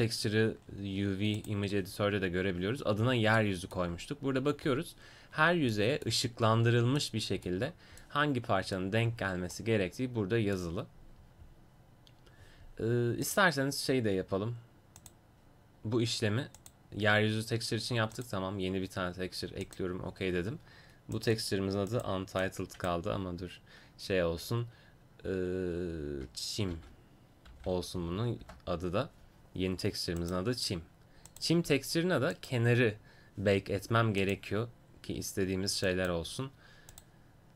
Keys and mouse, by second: 21.2-37.5 drag.